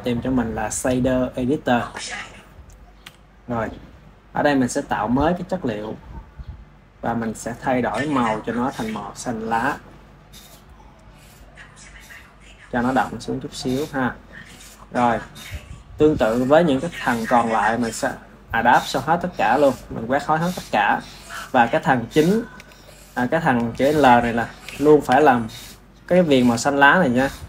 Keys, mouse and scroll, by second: 2.9 n, 5.4-6.5 drag, 6.5-8.2 middle drag, 8.2-8.5 drag, 18.5 click, 21.6-24.9 middle drag, 24.9 KP_1, 25.6-27.4 shift+middle drag.